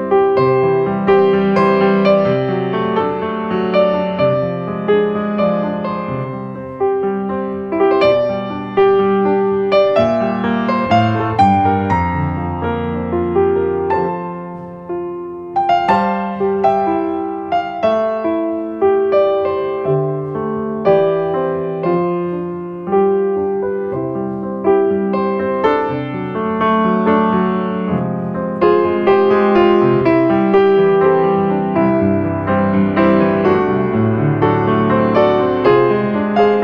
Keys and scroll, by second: 0.9 ctrl+space, 2.9 space, 15.0 ctrl+space.